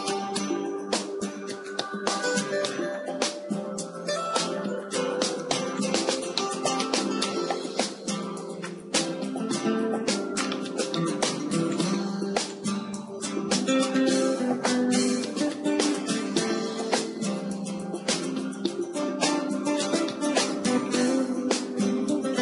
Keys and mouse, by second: 2.4-3.7 middle drag, 3.7-6.2 drag, 5.2 b, 8.0-9.2 middle drag, 10.2 middle click, 10.2 g, 12.6-14.6 drag, 14.6 KP_0, 15.9 z, 19.8 s, 22.3-22.4 right drag.